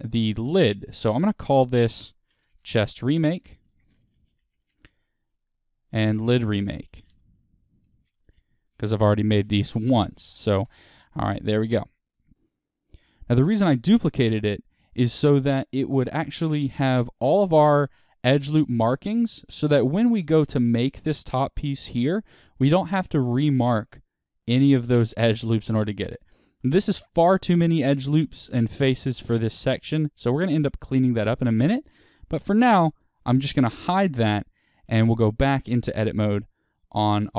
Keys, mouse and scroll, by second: 0.7-5.9 drag, 4.7 Return, 6.0-12.3 drag, 10.7 Return, 12.3-33.6 middle drag, 18.8-20.2 scroll down 4, 26.5-26.9 scroll up 2, 31.3 Tab, 33.6 click, 35.0 Tab, 35.6-36.4 scroll up 1, 36.6-37.3 middle drag.